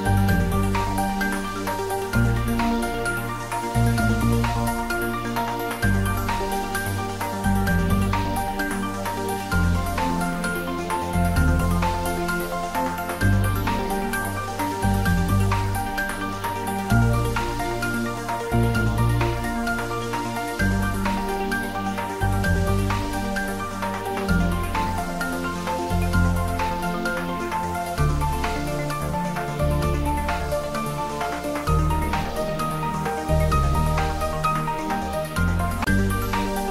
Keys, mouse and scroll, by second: 0.3 click, 1.0 ctrl+s, 1.0-2.2 ctrl+middle drag, 2.2 click, 4.1 ctrl+middle click, 4.4 shift+middle click, 5.1 click, 5.5 ctrl+middle click, 5.8 shift+middle click, 6.3 Tab, 6.7 shift+z, 7.6 2, 8.1-10.1 drag, 10.0-11.1 typing, 10.8 click, 11.5-15.2 middle drag, 15.2 Tab, 15.6-16.4 typing, 17.5 click, 17.7 Tab, 18.5-19.5 typing, 19.8 click, 21.4 Tab, 21.7 click, 23.0-24.3 middle drag, 24.3-27.0 drag, 27.2 middle click, 27.7 shift+z, 28.4-31.1 ctrl+middle drag, 31.1 click, 31.4 middle click, 32.0 shift+click, 32.3 middle click, 33.0-34.8 ctrl+middle drag, 34.8 shift+click, 35.1-36.7 middle drag.